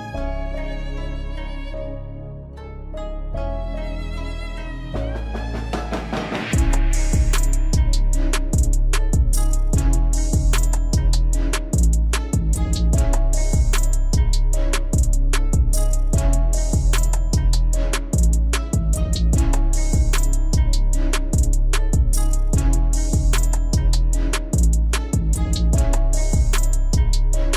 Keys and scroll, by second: 25.9 ctrl+s.